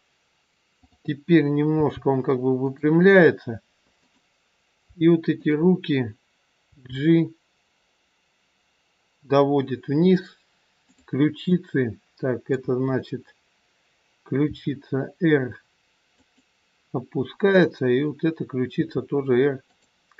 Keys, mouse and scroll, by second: 0.7 click, 1.7 g, 3.9 click, 5.4 shift+click, 6.6 g, 10.7 click, 11.6 middle click, 12.6 KP_1, 14.5 r, 17.5 click, 18.8 r.